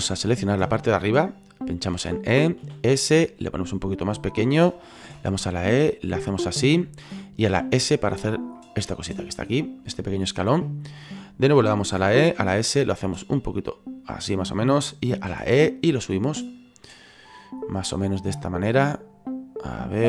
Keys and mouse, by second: 1.9 e, 2.6 s, 4.4 click, 5.0 e, 6.5 click, 7.4 s, 8.3 click, 8.5 middle click, 9.6 middle click, 10.1 shift+middle click, 12.0 e, 12.3 s, 14.2 click, 15.3 e, 16.5 click, 16.8 middle click, 18.0 middle click, 19.3 click.